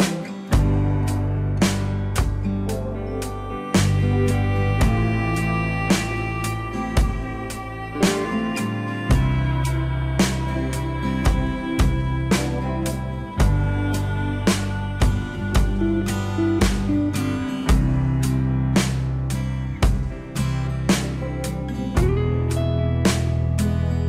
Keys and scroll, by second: 7.2 ctrl+z, 19.2 alt+w.